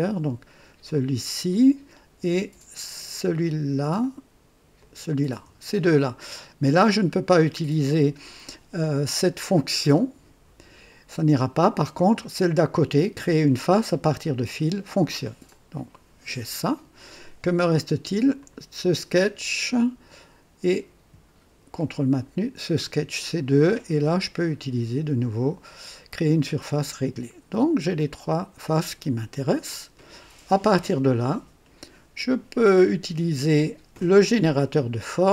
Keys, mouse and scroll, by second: 0.9 click, 3.1 ctrl+click, 4.0 ctrl+click, 4.8 ctrl+click, 14.3 click, 15.5-17.1 drag, 18.3 click, 22.1 ctrl+click, 26.5 click, 27.9-30.3 drag, 34.2 click.